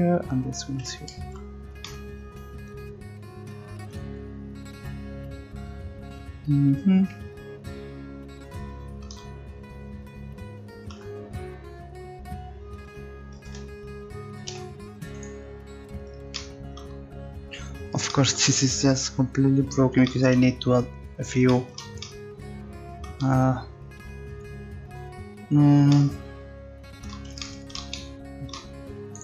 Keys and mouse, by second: 0.1 ctrl+z, 1.3 Tab, 10.9 Tab, 13.4 a, 13.5 a, 14.5 u.